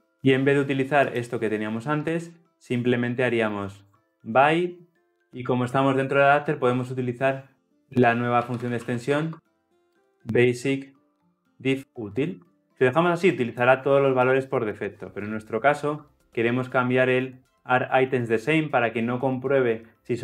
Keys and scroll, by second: 15.7 ctrl+p.